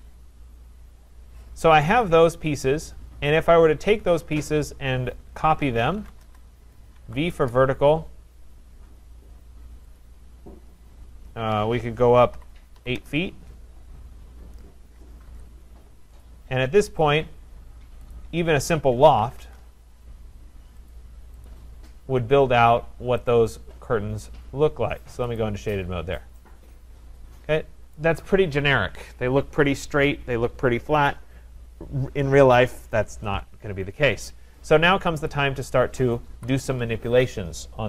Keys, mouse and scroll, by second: 0.1-0.7 scroll, 0.7-1.3 scroll, 2.0 click, 3.2-4.0 scroll, 4.0-4.6 scroll, 5.4-7.0 typing, 7.4 Return, 10.0 click, 12.1-13.0 typing, 14.4-15.0 scroll, 15.3 Return, 16.3 click, 17.1 click, 18.0 Return, 18.2 shift+click, 18.7-19.9 typing, 18.8 shift+click, 21.0 click, 21.5 click, 21.8 typing, 21.8-22.3 scroll, 22.3-22.7 scroll, 23.3 click, 25.4 click, 26.1-27.0 scroll, 28.0 middle click, 28.0 right click, 34.7 click, 35.3 click, 36.4 Delete.